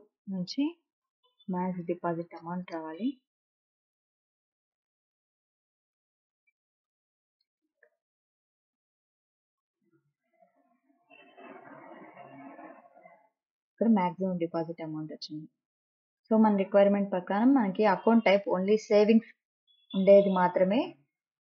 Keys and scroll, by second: 0.0-4.5 typing, 7.4 shift+-, 8.2 o, 10.2 t.